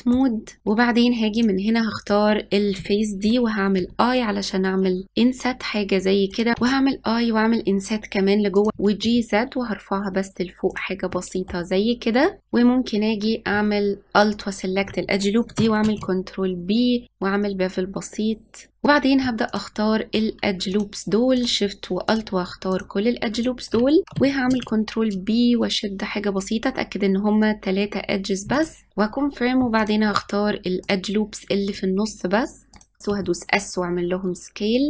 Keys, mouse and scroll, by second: 1.3 click, 3.7 o, 5.0 i, 6.5 i, 8.7 g, 11.0 middle click, 11.7-12.4 scroll down 1, 12.4-14.3 drag, 15.7 ctrl+b, 18.7 middle click, 19.4 alt+click, 20.7 alt+shift+click, 21.3 alt+shift+click, 22.0 alt+shift+click, 22.7 alt+shift+click, 23.3 alt+shift+click, 24.0 middle click, 24.5 ctrl+b, 28.9 middle click, 29.7 alt+click, 30.8 alt+shift+click, 31.6 alt+shift+click, 32.7 alt+shift+click, 33.1 s.